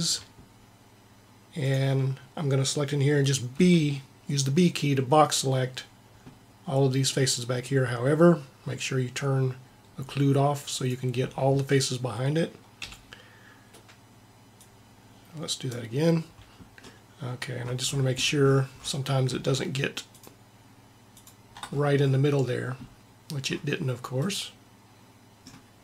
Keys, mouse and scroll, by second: 3.5 b, 10.7-12.5 drag, 12.8 b, 15.6 b, 16.8-18.2 middle drag.